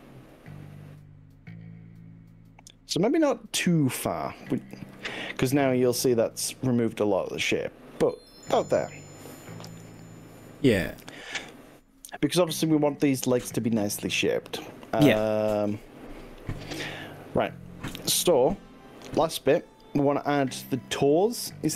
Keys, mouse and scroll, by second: 3.7-4.6 middle drag, 4.8 ctrl+z, 5.6 drag, 8.8-9.8 middle drag, 10.0 click, 11.6 middle click, 11.8 middle click.